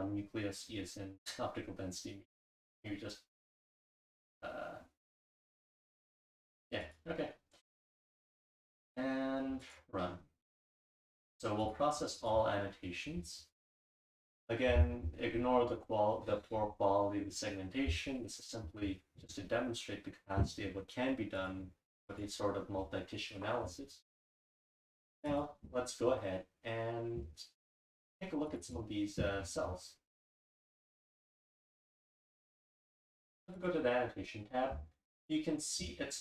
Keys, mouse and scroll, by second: 21.9 click, 22.1 click, 25.3 click, 28.5 click, 28.6 click, 29.4-30.6 scroll up 2, 30.6 click, 30.6-33.0 scroll up 1, 30.7 click, 31.4 click, 31.5 click, 32.0 click, 32.1 click, 33.0 scroll up 1, 33.1 click, 33.6 click, 33.9-36.2 scroll up 2.